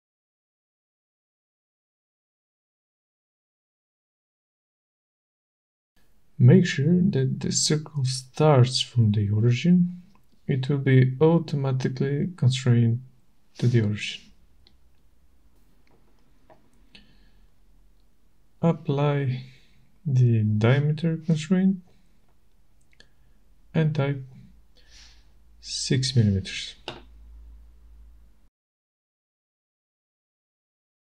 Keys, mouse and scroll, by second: 1.9 click, 2.6-3.2 scroll, 7.0 click, 11.1 click, 13.5 click, 14.3 click, 16.0 right click, 17.8 click, 20.7 click, 23.4 click, 26.1 6, 27.3 Return.